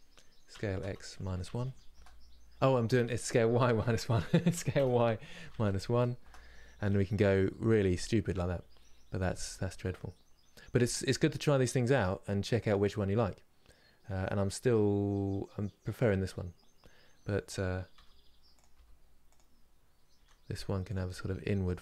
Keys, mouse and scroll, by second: 7.6-9.5 shift+middle drag, 9.5 Tab, 10.8-14.1 scroll down 1, 16.0 scroll up 3, 17.6 r.